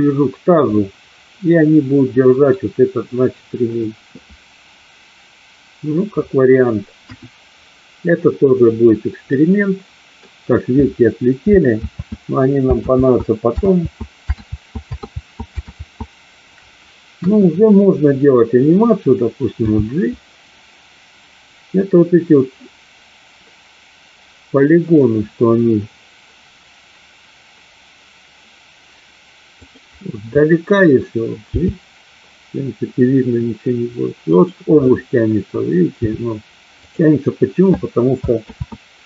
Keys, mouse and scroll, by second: 0.7-2.5 middle drag, 7.0 KP_1, 9.2-10.2 middle drag, 12.1 ctrl+z, 13.1 ctrl+z, 13.7 ctrl+z, 14.3 ctrl+z, 15.1 ctrl+z, 15.7 ctrl+z, 17.1 KP_1, 19.6 g, 31.6 g, 36.8 click, 38.5 ctrl+z.